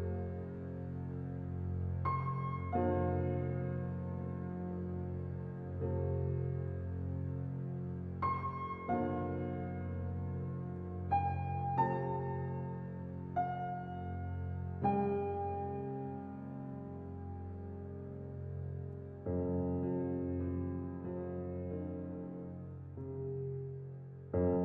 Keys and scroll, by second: 15.4 ctrl+t.